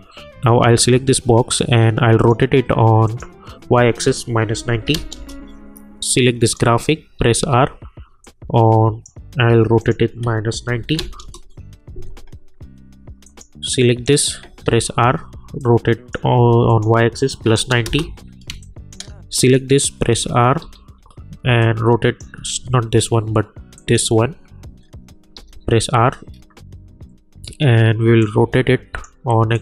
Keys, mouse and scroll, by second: 1.6-3.0 drag, 5.1 Return, 6.4 click, 7.4 r, 8.2-9.8 drag, 10.5 -, 11.2 Return, 13.3 click, 14.6 r, 15.6 click, 17.8 Return, 18.5 space, 18.6 click, 20.0 r, 20.6 r, 21.6 click, 22.4 ctrl+z, 23.7 click, 24.7-25.0 scroll down 1, 25.3 r, 26.3 scroll, 26.4-26.9 scroll down 1, 26.9 scroll up 1, 27.0 scroll down 1, 28.2-29.5 drag.